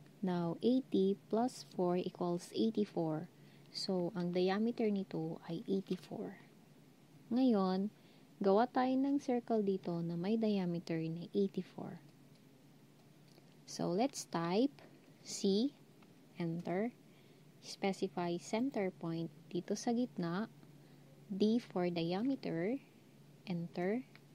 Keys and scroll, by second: 15.4 c, 21.2 d.